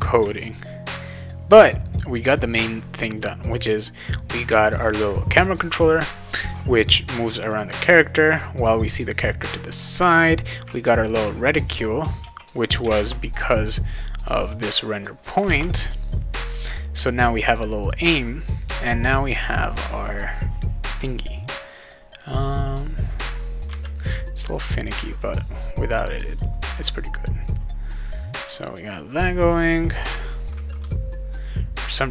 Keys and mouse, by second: 0.2 a, 12.2 alt+Tab, 12.8 alt+Tab, 14.2 click, 14.4 click, 14.6 click, 15.5 alt+Tab, 17.0 click, 30.8 w.